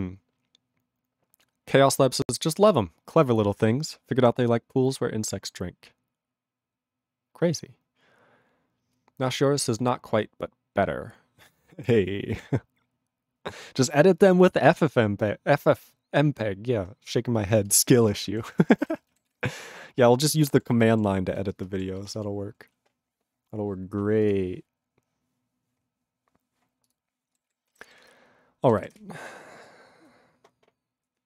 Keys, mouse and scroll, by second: 17.4 ctrl+a, 17.5 ctrl+space, 17.6 ctrl+e, 17.7 ctrl+g, 18.0 ctrl+space, 18.1 ctrl+a, 18.2 ctrl+p, 18.4 ctrl+g, 18.4 ctrl+e, 18.5 ctrl+n, 18.6 ctrl+n, 18.8 ctrl+n, 18.9 ctrl+e, 19.2 ctrl+s, 26.8 click, 26.9 click, 27.4 ctrl+s, 28.9 ctrl+Return.